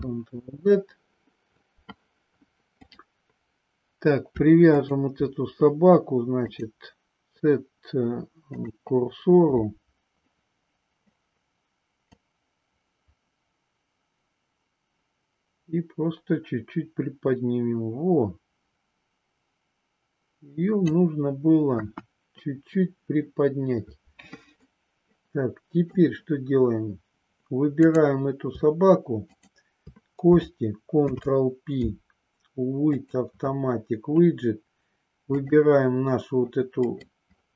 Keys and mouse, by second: 0.2 ctrl+z, 4.7 shift+click, 6.5-8.8 drag, 12.1-21.0 drag, 21.7 KP_1, 24.6-26.2 middle drag, 29.2 shift+click, 31.0 ctrl+p, 35.4 click, 36.8 middle click.